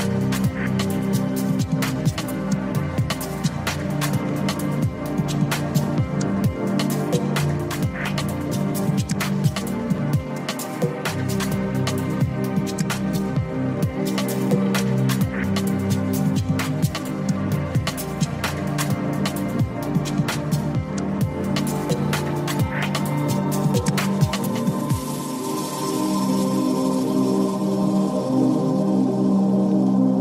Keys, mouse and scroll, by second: 1.8 click, 2.8 ctrl+z, 3.3 ctrl+z, 4.0 ctrl+z, 5.8-6.9 drag, 9.1 g, 12.6 click, 13.9 click, 15.4 g, 17.0 click, 17.9 ctrl+x, 18.1 ctrl+z, 19.2 ctrl+z, 20.1 ctrl+z, 21.1-24.2 drag, 25.5 g, 26.6 click, 26.9 click, 29.0 click.